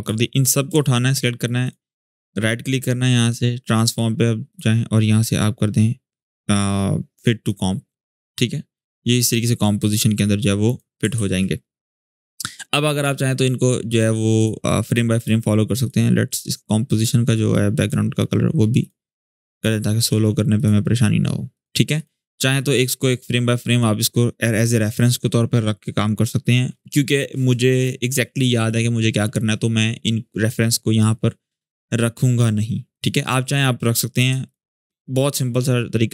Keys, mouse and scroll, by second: 1.4 shift+click, 1.8 right click, 4.2 click, 7.2-10.6 drag, 10.9 ctrl+z, 12.8 click, 14.9 right click, 16.0 click, 32.6 click, 34.2 shift+click.